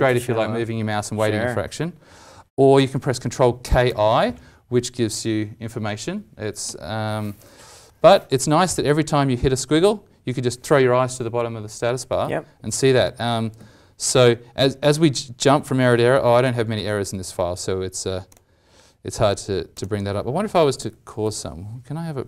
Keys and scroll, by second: 3.6 ctrl+k, 3.8 ctrl+i, 13.0 ctrl+shift+F12, 13.5 ctrl+shift+F12, 14.5 ctrl+shift+F12.